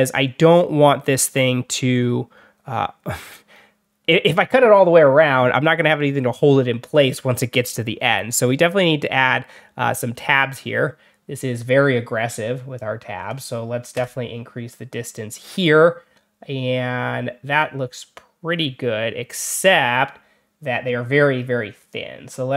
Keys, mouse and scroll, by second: 8.6 click, 12.6 click, 21.8 click.